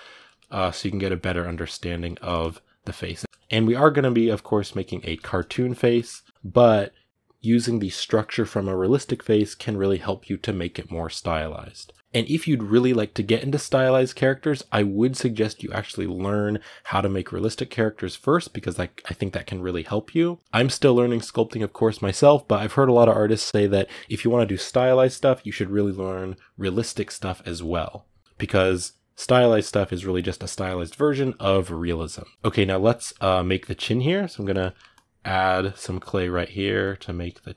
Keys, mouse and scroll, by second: 0.0 middle click, 0.3-1.9 drag, 1.9 ctrl+middle click, 2.9 click, 3.1-33.8 middle drag, 33.8 click, 34.2 ctrl+middle click, 34.7-37.5 drag.